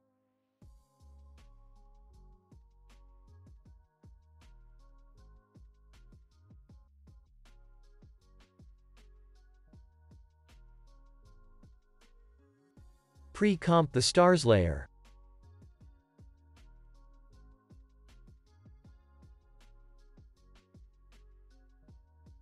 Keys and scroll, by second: 3.6 space, 5.4 y, 12.4 ctrl+s, 15.4 ctrl+shift+c, 16.9 End, 17.1 BackSpace, 18.4 Return, 21.9 space.